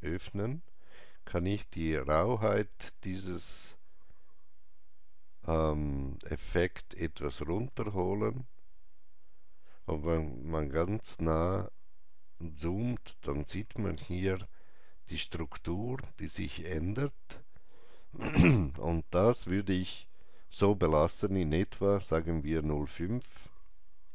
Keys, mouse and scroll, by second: 0.2 click, 3.1-15.2 drag, 3.1 scroll down 1, 10.7 alt+right click, 16.1-20.3 drag, 16.1 alt+right click, 22.9-24.1 drag, 22.9 alt+right click, 24.0 KP_Decimal.